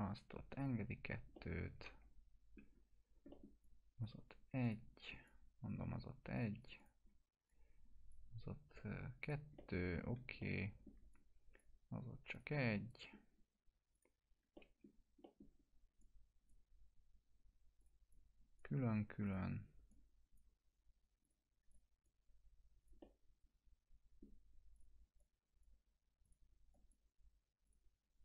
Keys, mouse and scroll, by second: 1.3-2.6 middle click, 3.6-4.3 click, 6.4-8.1 drag, 9.6-10.2 alt+middle click, 10.4-11.0 middle click, 11.1-11.7 click, 12.9-13.9 alt+middle drag, 13.9 click, 14.5 middle click, 14.9 scroll down 2, 15.2 middle click, 16.0-16.6 drag, 23.0-24.3 middle drag, 24.8 click, 26.3 click.